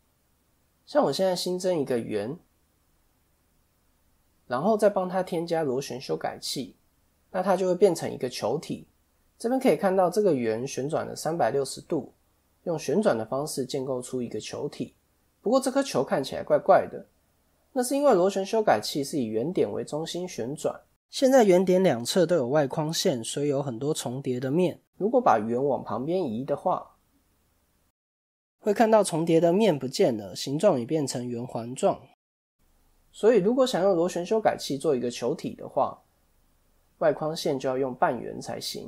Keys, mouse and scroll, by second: 2.4 click, 3.2 ctrl+a, 4.6 click, 6.8 middle click, 17.5 Tab, 18.6 KP_1, 22.0 middle click, 25.1 click, 29.2 middle click, 30.5 middle click, 33.3 KP_1, 35.3 a, 36.4 b, 38.3 x.